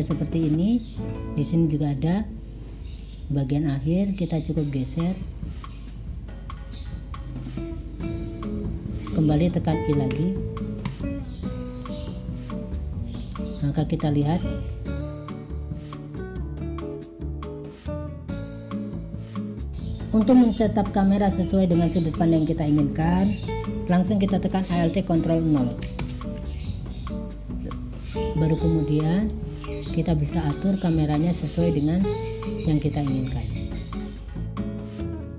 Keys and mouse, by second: 1.4 click, 3.1 click, 4.7-8.6 drag, 10.2 i, 11.8 click, 13.3 click, 14.0 click, 18.8 click, 19.2 click, 26.1 ctrl+alt+KP_0, 29.2 click, 30.8 click, 32.2 click, 34.6 click.